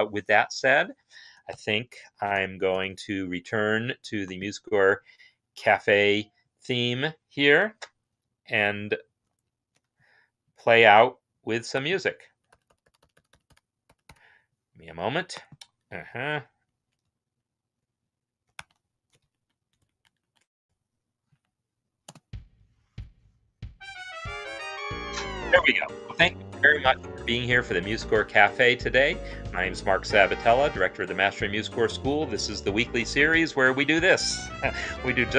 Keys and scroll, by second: 9.2 ctrl+F10, 12.2-16.5 Down, 18.2-20.2 typing, 19.2 ctrl+Home.